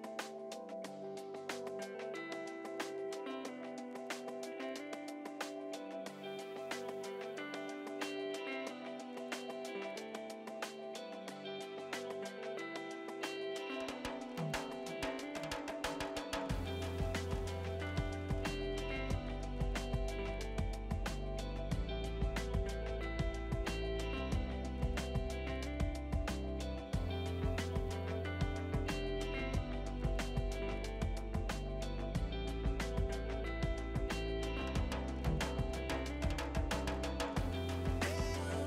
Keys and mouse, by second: 3.4 click, 8.7 Pause, 15.9 click, 16.8 click, 18.0 click, 22.1 ctrl+1, 22.6 click, 23.5 KP_2, 23.6 Return, 24.8 click, 32.5 right click, 32.7 click, 33.5 w, 34.0 r, 34.3 Return, 35.5 click, 35.7 click, 36.2 x, 36.4 Return.